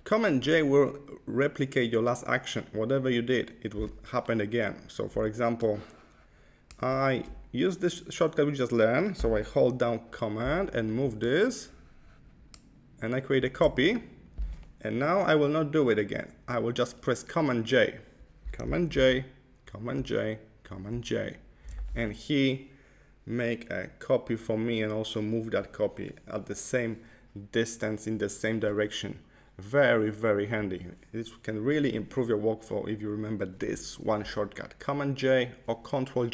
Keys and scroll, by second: 18.8 super+j, 19.8 super+j, 20.8 super+j.